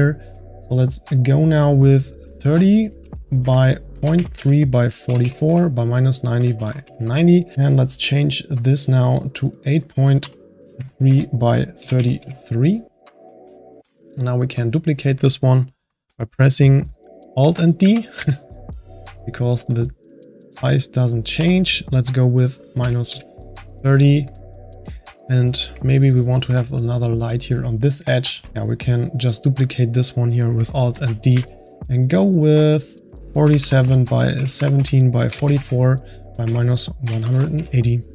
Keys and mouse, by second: 2.3-5.2 drag, 5.2 KP_4, 9.5-12.2 drag, 11.9 KP_3, 14.2 click, 14.7 click, 17.8 alt+d, 20.1-23.2 drag, 25.8-29.4 middle drag, 29.4 click, 30.9 alt+d, 32.2-35.4 drag, 35.4 KP_4.